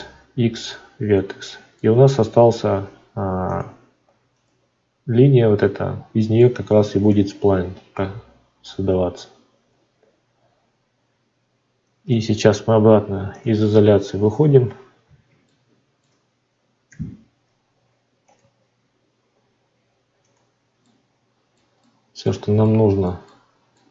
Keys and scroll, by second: 2.1 Tab, 13.4 /.